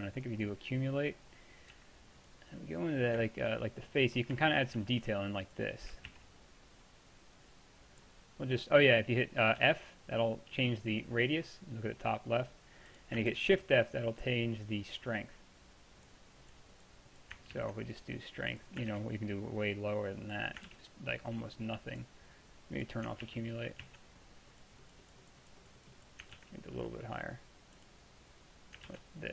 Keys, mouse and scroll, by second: 1.8 f, 4.8 f, 6.1 ctrl+z, 9.6 f, 13.1 click, 13.3 shift+f, 17.6 ctrl+z, 18.9 shift+f, 20.7 shift+f, 23.3 ctrl+z, 23.9 ctrl+z, 26.4 ctrl+f, 28.9 ctrl+f.